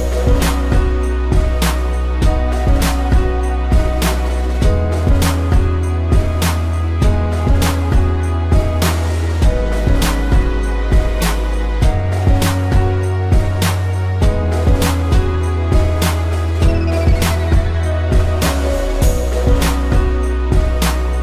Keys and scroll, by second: 1.3 space, 3.7 space, 4.9 space, 8.0 space, 10.1 space, 12.0 space, 12.5 p, 17.5 ctrl+z, 18.4 ctrl+=, 18.7 space.